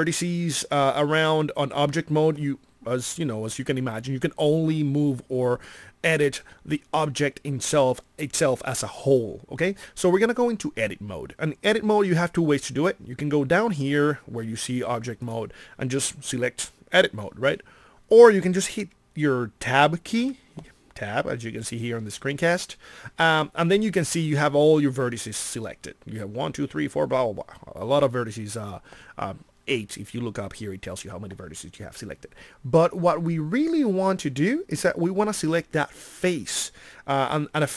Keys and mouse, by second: 20.2 Tab.